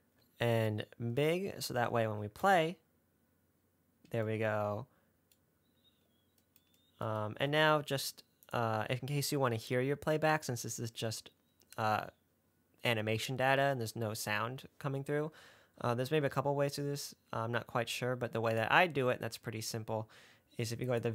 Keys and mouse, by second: 2.7 space, 7.6 space, 8.7 click, 18.8 click.